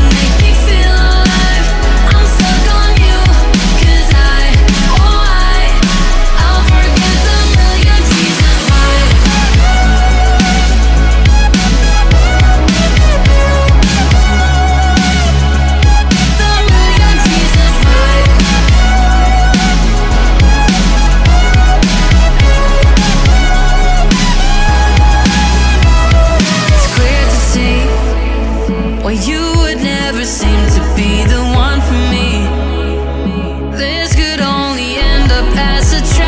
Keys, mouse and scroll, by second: 0.3 ctrl+z, 0.9 g, 3.8 Tab, 4.1 click, 4.4 middle click, 5.1 click, 5.6-7.6 right drag, 7.7-9.6 middle drag, 9.9 Tab, 11.0 g, 13.3 Tab, 13.8-15.7 right drag, 15.9 Tab, 16.2 Tab, 16.5-17.8 middle drag, 17.8 click, 21.5 click, 21.8-23.4 middle drag, 23.4-27.7 drag, 27.7-32.1 middle drag, 32.1 click, 34.5 click, 35.9-36.2 drag.